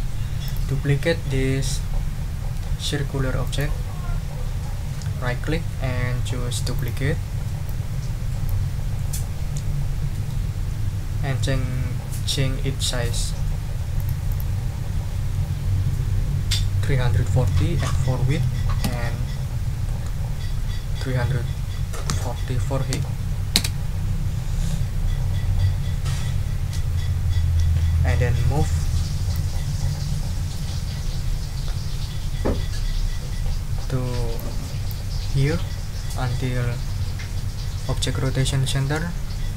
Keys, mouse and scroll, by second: 0.4 click, 3.4 right click, 6.7 click, 7.6-8.4 scroll up 2, 8.4 scroll up 1, 8.9-9.8 scroll up 2, 9.8-10.5 scroll up 1, 14.0-14.6 scroll up 5, 14.2 click, 14.9 ctrl+a, 17.0-18.3 typing, 18.8 Tab, 21.4 3, 22.9 0, 23.5 Return, 29.3-30.3 scroll up 2, 30.3-32.8 scroll up 1, 32.8-34.2 scroll up 1, 34.2 click, 36.5-39.5 drag.